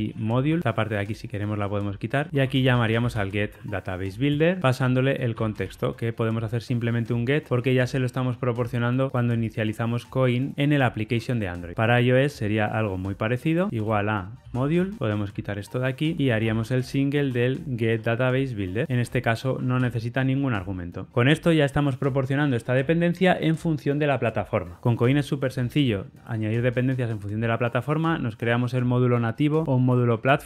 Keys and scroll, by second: 4.5 Return, 7.8 ctrl+alt+o, 15.1 super+BackSpace, 15.1 ctrl+y, 18.8 Return, 19.4 alt+super+l.